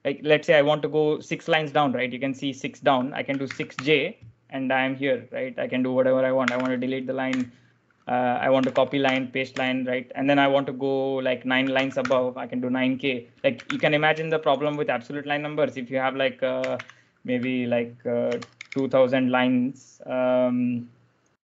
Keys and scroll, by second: 3.1-4.1 typing, 6.0-7.1 typing, 8.2-9.9 typing, 11.4-12.2 typing, 13.5-14.4 typing, 16.4-19.6 typing.